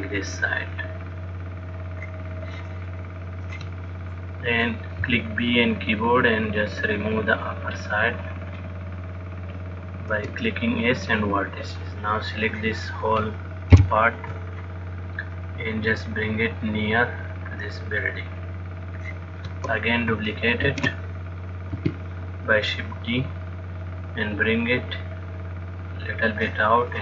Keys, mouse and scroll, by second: 3.6 click, 5.3 b, 10.4 x, 12.7 click, 14.1 ctrl+l, 15.6 click, 21.4 shift+d, 23.1 click.